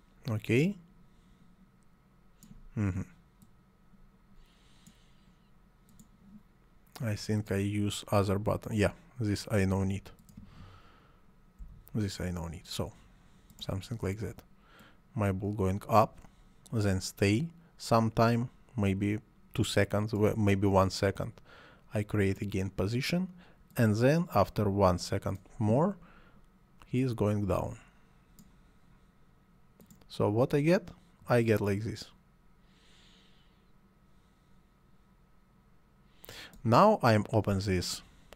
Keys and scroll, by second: 11.6 Delete.